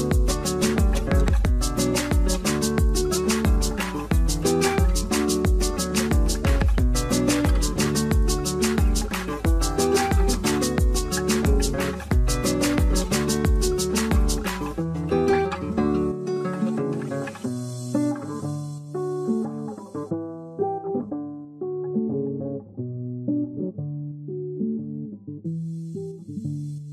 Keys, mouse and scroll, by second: 2.7 double click, 2.7 middle click, 3.0 alt+w, 4.1 alt+w, 4.4 middle click, 5.3 ctrl+click, 5.6 alt+middle click, 7.5 alt+middle click, 10.1 r, 11.8 alt+scroll down 2, 12.1 middle click, 12.7-13.6 typing, 13.3 scroll down 1, 13.9 middle click, 14.4 scroll up 1, 15.3 alt+middle click, 17.4 ctrl+z, 17.8 alt+click, 20.7 middle click, 21.3 z, 21.5 z, 22.2 middle click, 23.4 w, 24.0 shift+click.